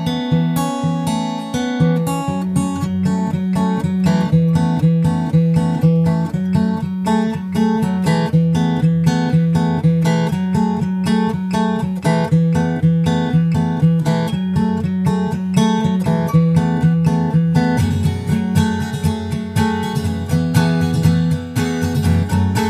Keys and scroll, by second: 0.4 super+Tab, 0.8 super+Tab, 14.0 super+Right, 16.7 shift+super+Right, 16.9 super+c, 17.4 super+v, 17.7 super+Left, 21.6 super+Right, 22.0 super+v, 22.4 super+Left.